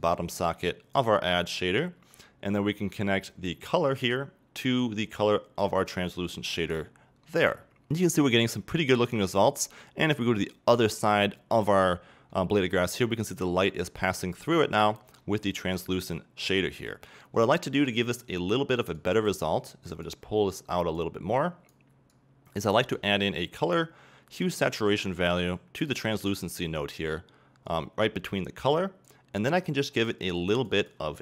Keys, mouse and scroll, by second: 0.0-7.5 drag, 7.5-11.9 middle drag, 11.9-12.4 scroll up 2, 12.4-14.4 middle drag, 14.2 scroll down 2, 17.6-19.0 middle drag, 19.0 click, 19.7 click, 20.6 click, 21.4 click, 22.1 click, 25.9 shift+a, 26.9 click.